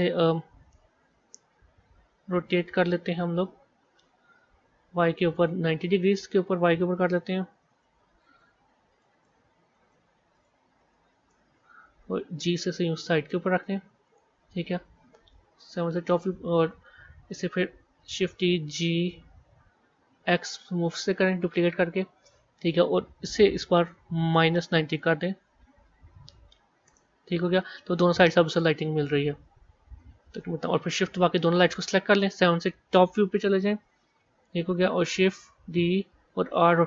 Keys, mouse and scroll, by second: 0.4 KP_1, 2.4 click, 3.3 r, 6.5-12.2 drag, 12.2 g, 15.6 KP_7, 17.1 KP_1, 18.4 shift+d, 23.6-25.2 drag, 29.3 g, 31.4 shift+click, 33.3 KP_7, 33.9 scroll down 1, 35.7 shift+d.